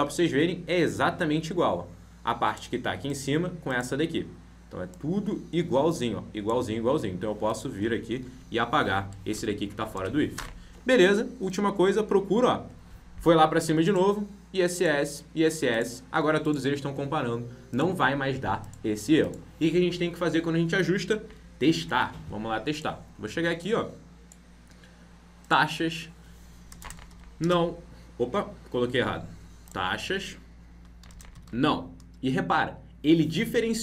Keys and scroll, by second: 21.2 ctrl+b, 21.7 alt+Tab.